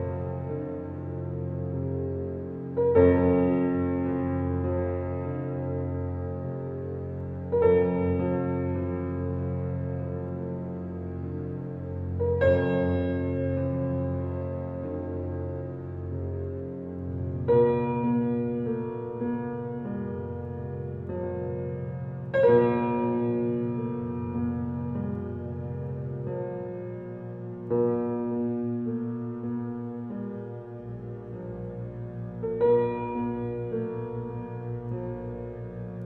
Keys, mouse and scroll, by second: 10.6 Escape, 11.2 click, 14.8 click, 18.3-20.6 drag, 32.3 Escape, 34.7 scroll up 1.